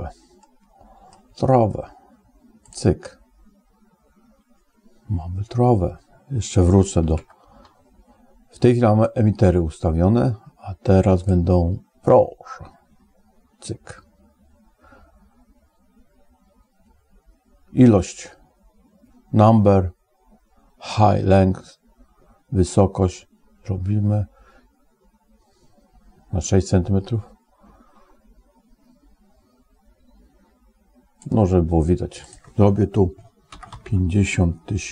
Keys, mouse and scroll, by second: 0.2 middle click, 7.0 ctrl+Tab, 11.1 click, 22.5 click, 32.1 click, 33.7 0.